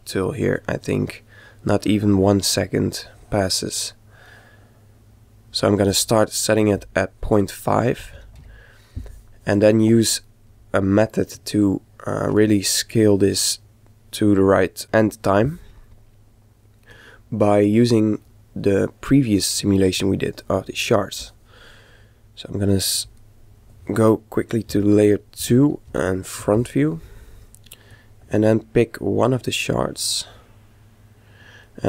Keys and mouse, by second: 6.7 click, 10.4-14.3 middle drag, 16.1-17.8 middle drag, 17.3 click, 17.9-19.8 middle drag, 23.0 click, 23.9 KP_3, 25.1 KP_1, 25.7 KP_5, 27.9 click.